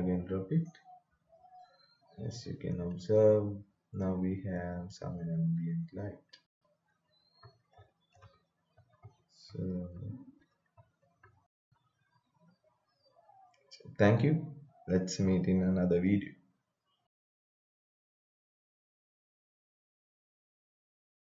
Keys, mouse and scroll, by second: 1.6 right click, 2.5-11.3 typing.